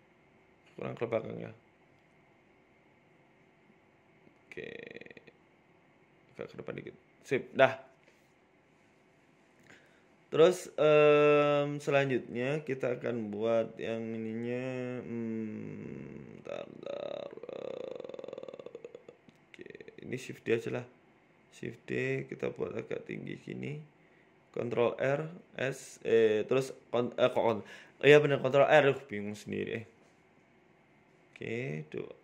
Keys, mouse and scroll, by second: 0.3 scroll up 3, 0.5 shift+middle click, 1.1 KP_3, 1.8 scroll up 1, 2.2 scroll down 2, 4.0 shift+right click, 4.5 g, 6.6 right click, 7.3 g, 8.5 KP_1, 8.8-9.3 scroll down 4, 9.3-10.3 scroll down 1, 10.3 right click, 11.8 Tab, 12.1 Tab, 13.5 shift+a, 17.3-17.6 scroll up 2, 18.2-18.9 scroll down 1, 18.9 shift+a, 20.9 g, 22.1 s, 23.8 s, 24.9 scroll up 1, 25.1 shift+middle click, 25.3 Tab, 25.5-25.8 scroll up 2, 25.7 shift+middle click, 26.2 ctrl+r, 27.2 s, 29.4 ctrl+r, 30.3 s.